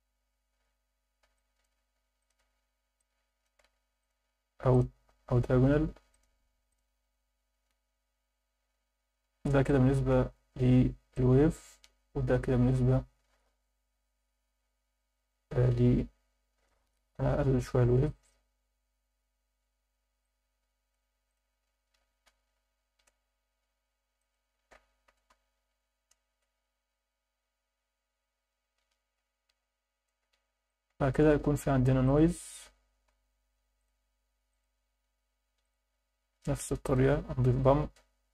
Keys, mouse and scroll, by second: 1.3 alt+shift+middle click, 2.2 ctrl+shift+click, 3.0 alt+shift+middle click, 4.0-4.8 drag, 6.1-6.8 drag, 7.7-9.0 scroll down 7, 9.7 alt+shift+middle click, 11.1 click, 12.0 click, 13.9 scroll up 2, 17.6 scroll up 2, 18.5 scroll up 2, 20.2 click, 21.3-23.2 drag, 24.2-26.3 drag, 27.3-28.4 scroll down 6, 29.1-29.6 scroll up 4, 30.6 alt+shift+middle click, 31.7 shift+a, 35.6 click, 36.3 shift+d, 36.8 click.